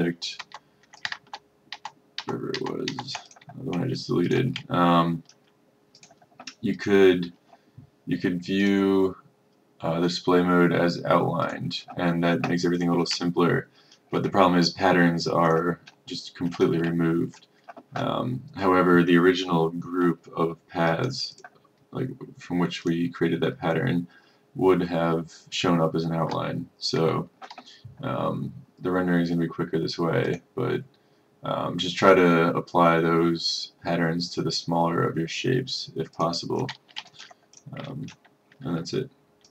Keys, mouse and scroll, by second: 0.5 ctrl+z, 1.1 click, 1.3 z, 1.8 z, 2.7 click, 3.4 click, 4.4 click, 4.8-5.1 ctrl+scroll, 6.0 click, 13.3-13.7 ctrl+scroll, 15.5 click, 16.0 middle click, 17.1-17.5 ctrl+scroll, 20.9 click, 37.6 click, 38.3-39.5 ctrl+scroll.